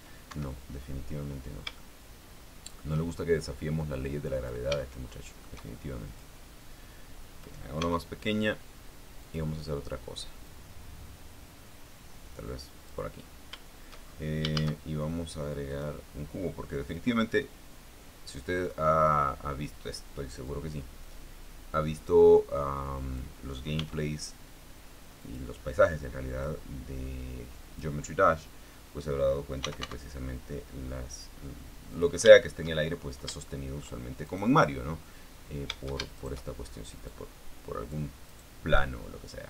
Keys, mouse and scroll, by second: 1.0 Escape, 1.8-2.3 scroll up 2, 2.3 scroll up 1, 2.5-3.6 shift+middle drag, 4.6 click, 5.4 shift+middle click, 6.9-8.4 drag, 8.5 s, 9.9 click, 11.2-13.8 drag, 14.7-15.0 scroll down 2, 15.2 shift+a, 16.4 click, 17.6-19.5 drag, 19.5-21.1 scroll up 1, 21.1-24.1 drag, 24.1 middle click, 24.4 s, 25.9 click, 27.1-28.7 drag, 30.1-31.0 typing, 32.6 click, 33.0 shift+middle click, 34.2 shift+middle click, 34.9 shift+right click, 36.9 shift+right click, 37.8-38.8 drag, 39.0 right click.